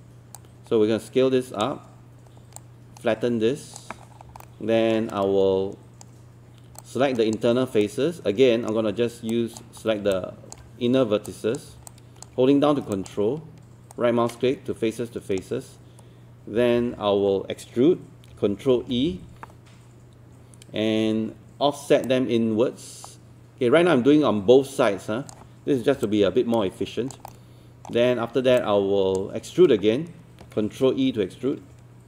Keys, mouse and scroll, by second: 0.4 click, 4.0 scroll up 1, 4.4 alt+middle click, 5.1-6.4 right drag, 6.8 alt+click, 7.8 right click, 9.3 click, 10.1 alt+click, 11.3 shift+click, 11.9 alt+click, 12.9 alt+click, 13.9-15.4 ctrl+right drag, 16.6 typing, 18.8 ctrl+e, 22.1-25.4 drag, 26.1 alt+click, 27.3 alt+middle click, 28.6 alt+click.